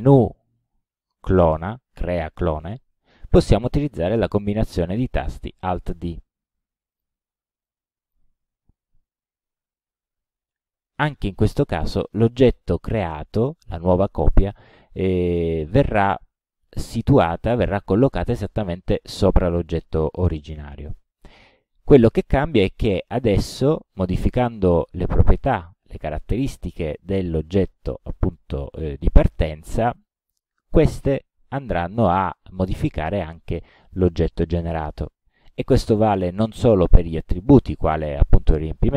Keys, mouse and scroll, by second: 0.0 click, 7.0 click, 7.7 click, 10.1 alt+d, 11.6-12.9 drag, 22.7-23.9 drag, 30.0 click, 36.0 click.